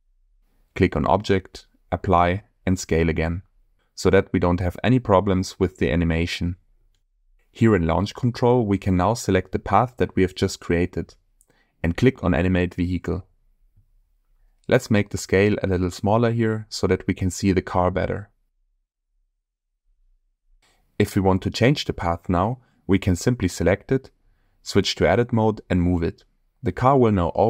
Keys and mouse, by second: 1.6-3.3 drag, 8.7 click, 13.2-15.3 drag, 16.3-17.3 shift+drag, 17.7 space, 19.0-20.4 middle drag, 23.4 click, 24.2 Tab, 24.9 click, 25.8 g.